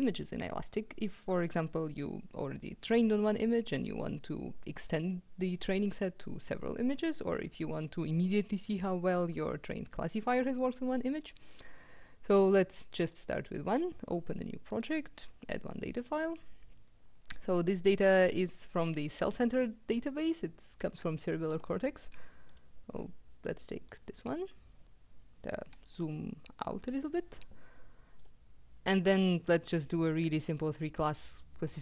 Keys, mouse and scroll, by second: 13.0 click, 14.8 click, 16.1 click, 18.0 click, 22.5 click, 23.8 click, 26.0-26.8 ctrl+scroll down 2, 28.2 click.